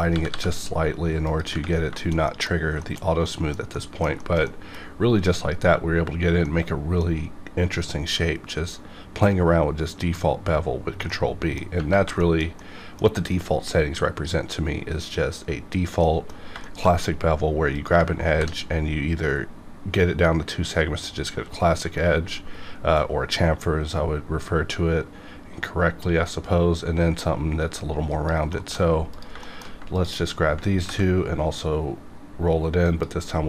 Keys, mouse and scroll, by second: 0.1 g, 0.3 g, 1.2 click, 1.9 scroll down 1, 1.9 shift+middle click, 2.5 scroll down 1, 2.8 shift+middle click, 4.2-9.3 shift+middle drag, 11.1 shift+Num_Lock, 11.1 shift+middle click, 11.7 scroll up 2, 12.2-15.4 shift+middle drag, 16.0 middle click, 16.6 shift+middle click, 17.7 click, 18.3 ctrl+b, 19.3 scroll down 1, 24.8-25.5 scroll up 1, 28.1 click, 28.5 middle click, 29.2 click, 29.4 shift+middle click, 29.9 shift+click, 30.2 scroll up 1, 30.8 ctrl+b, 31.6 scroll down 1, 32.8 click.